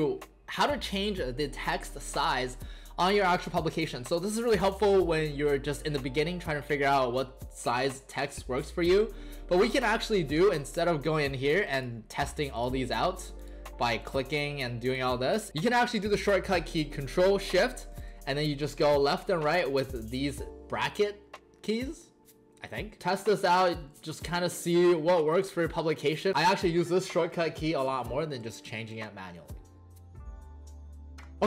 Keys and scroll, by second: 23.0 ctrl+shift+., 23.7 ctrl+shift+,, 25.4 ctrl+shift+., 26.0 ctrl+shift+,, 26.2 ctrl+shift+., 26.3 ctrl+shift+,, 26.7 ctrl+shift+., 27.6 ctrl+shift+,, 27.9 ctrl+shift+., 28.1 ctrl+shift+,, 28.2 ctrl+shift+., 28.4 ctrl+shift+,, 28.7 ctrl+shift+., 28.9 ctrl+shift+,.